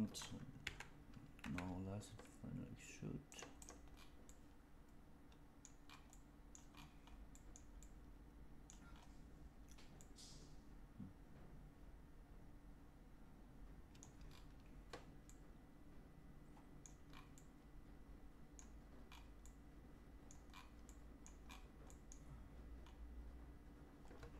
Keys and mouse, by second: 0.5 e, 4.2-5.5 middle drag, 6.0 middle click, 7.2 middle click, 7.7 middle click, 9.9-13.9 middle drag, 15.2-16.7 middle drag, 17.3-18.5 middle drag, 19.4 middle click, 20.8 middle click, 21.8 middle click.